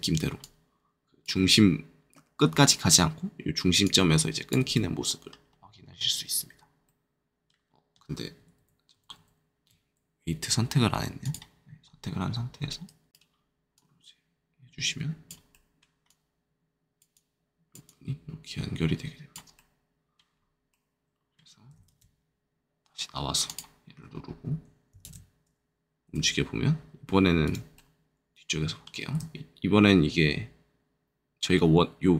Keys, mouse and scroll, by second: 0.4 click, 3.8 click, 4.7 middle click, 6.4-6.8 scroll down 2, 6.8 middle click, 8.5 ctrl+z, 8.9 ctrl+z, 11.2 click, 11.8 scroll up 2, 13.7 click, 16.0 click, 17.1 click, 19.5 middle click, 20.2-20.6 scroll down 2, 20.6 middle click, 21.7 ctrl+middle click, 21.8 ctrl+Tab, 23.4 right click, 25.0 ctrl+Tab, 26.0 r, 27.4 right click, 27.7 middle click, 29.0 r.